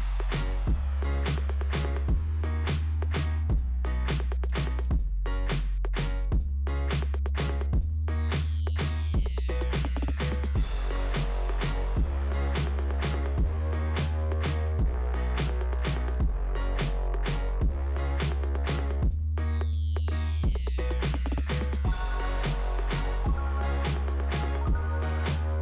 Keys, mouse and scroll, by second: 1.7 ,, 3.6 click, 5.0 click, 8.1 click, 9.2 click, 10.4 click, 13.5 click, 17.4 click, 19.1 click, 19.4 right click, 19.4 double right click.